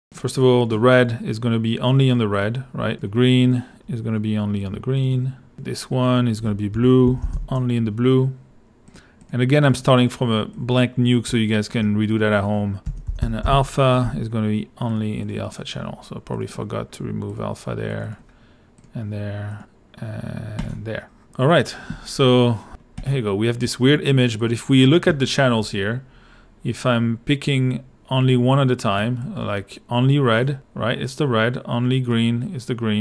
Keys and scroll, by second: 0.0-0.4 typing, 6.5-7.8 typing, 12.6-14.0 typing.